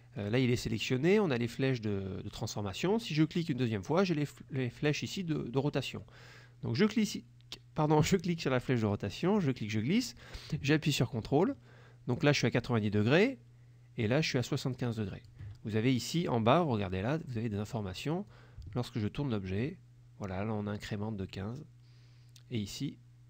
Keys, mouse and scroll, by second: 0.3 click, 3.6 click, 9.0-15.6 drag, 18.4-23.2 ctrl+drag.